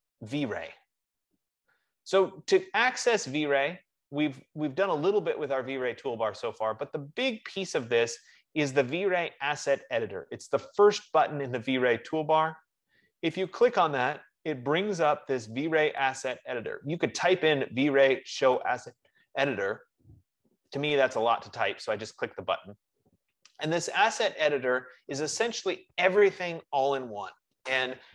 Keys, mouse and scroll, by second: 14.0-19.1 drag.